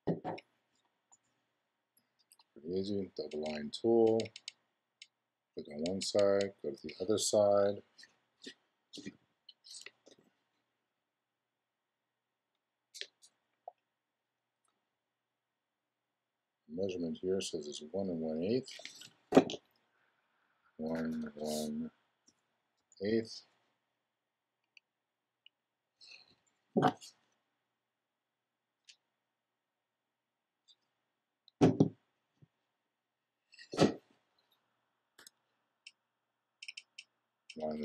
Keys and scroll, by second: 20.6 i, 20.9 space, 35.2 BackSpace.